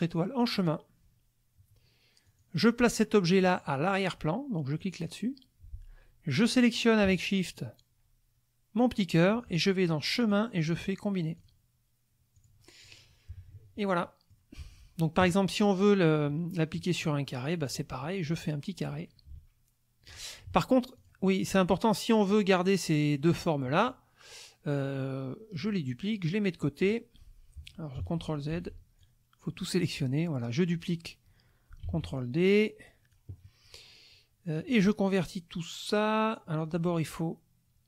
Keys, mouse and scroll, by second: 0.4 click, 2.2 click, 4.8 click, 7.4 shift+click, 10.2 click, 11.4 click, 12.3 click, 13.3 KP_Subtract, 14.0 click, 16.3 middle click, 17.7 click, 18.4-20.3 drag, 21.0 click, 21.2 middle click, 22.2 click, 25.6 click, 26.1 click, 28.0 ctrl+z, 29.0 ctrl+click, 31.8 ctrl+d, 32.2 ctrl+click, 34.6 click.